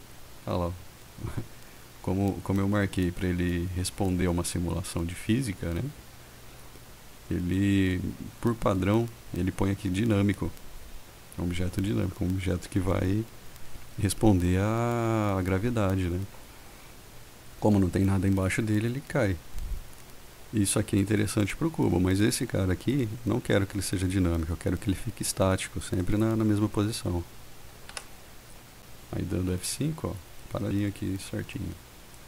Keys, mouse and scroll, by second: 26.2 click, 28.1 F5.